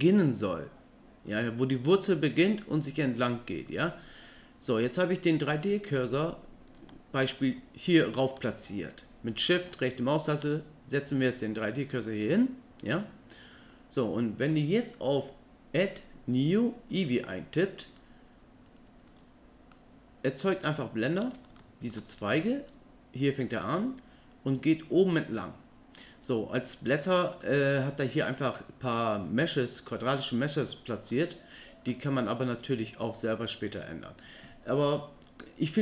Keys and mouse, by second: 7.4 shift+right click, 10.0 shift+right click, 17.0-18.6 drag, 19.7-20.4 middle drag, 20.7-21.2 shift+middle drag, 21.6 ctrl+middle click, 26.9 middle click, 31.1-31.9 ctrl+middle drag, 32.2 middle click.